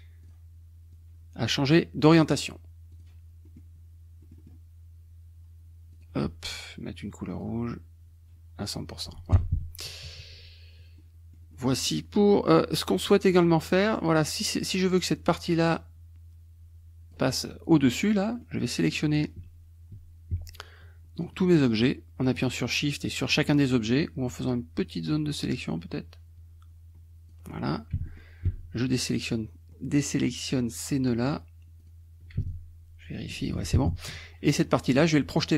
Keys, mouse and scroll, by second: 0.3 click, 0.9-2.3 drag, 2.9 click, 3.6 middle click, 4.2 middle click, 5.9 click, 7.4 click, 8.9 click, 9.3 F1, 9.9 KP_Subtract, 11.1-12.3 drag, 14.3-17.3 drag, 18.3 click, 18.8 click, 21.2 shift+click, 21.6 shift+click, 22.7 shift+click, 23.9-27.5 shift+drag, 28.1 shift+middle click, 29.2 shift+click, 30.2 shift+click, 31.1 shift+click, 31.8 shift+click, 32.5-33.7 shift+drag, 33.6 ctrl+z.